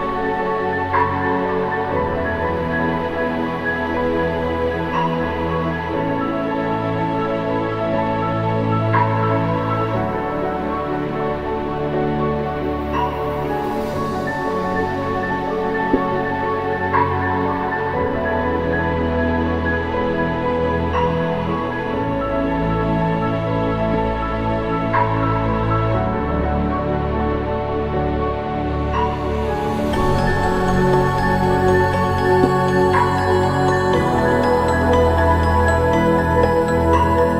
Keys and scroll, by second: 3.2 ctrl+=, 34.0 ctrl+0, 34.9 ctrl+=.